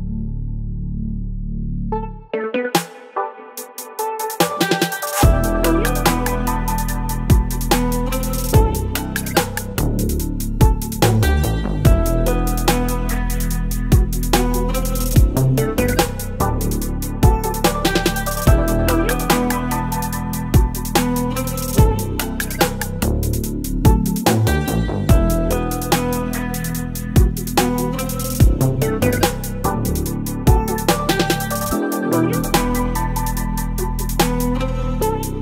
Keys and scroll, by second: 0.3 v, 0.4 space, 1.0 ctrl+t, 3.9 space, 5.0 Return, 5.2 Left, 5.3 Left, 7.3 space, 8.3 ctrl+t, 10.6 alt+shift+space, 11.7 Return, 12.5 space, 15.7 Return, 15.8 Right, 16.0 Right, 16.0 Right, 21.0 Return, 21.6 space, 23.8 ctrl+BackSpace, 24.5 space, 25.6 space, 26.1 v, 27.4 space, 28.1 space, 29.2 ctrl+BackSpace, 30.3 ctrl+BackSpace, 30.9 ctrl+BackSpace, 31.1 space, 32.6 v, 33.4 ctrl+t, 34.3 Left, 34.3 Left, 34.3 Left, 34.4 Left, 34.6 Left, 34.9 Right, 35.0 Right, 35.3 Return.